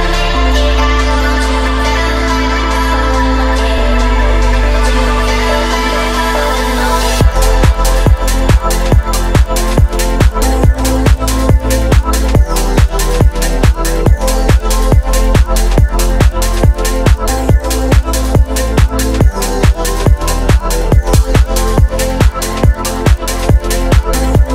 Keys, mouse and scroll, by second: 1.3 click, 1.9 click, 2.9-4.0 drag, 4.6 click, 8.4-11.7 drag, 12.4 click, 13.3 space, 14.6 space, 14.8-17.7 middle drag, 18.3-20.3 drag, 21.5 click, 22.1 click, 22.5 space, 23.1-23.4 middle drag, 23.6-24.5 scroll up 1.